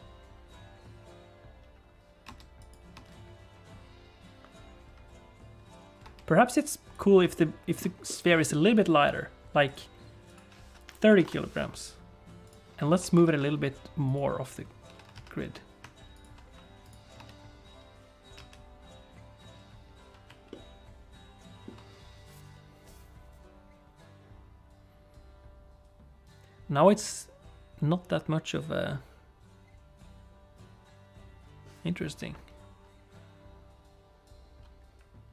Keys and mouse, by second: 2.3 space, 2.6 click, 2.9 space, 6.0 space, 6.4 click, 6.9 click, 7.3 shift+middle click, 8.0 middle click, 10.2-11.7 drag, 12.9 g, 14.8 g, 17.1 space, 18.7 alt+a, 20.7-21.9 shift+middle drag.